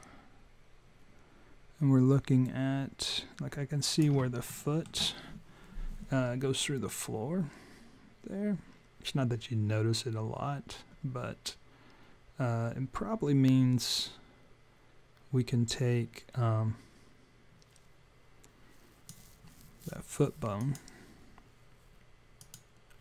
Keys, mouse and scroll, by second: 4.4 alt+middle click, 7.0 click, 20.6 click, 22.4 click.